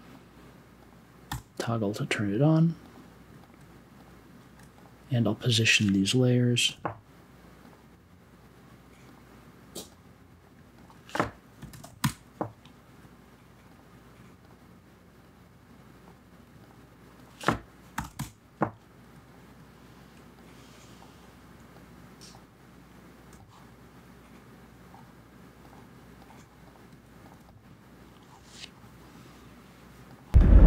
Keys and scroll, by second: 1.3 t, 6.6 a, 11.3-12.3 typing, 17.7-18.5 typing, 27.3 1.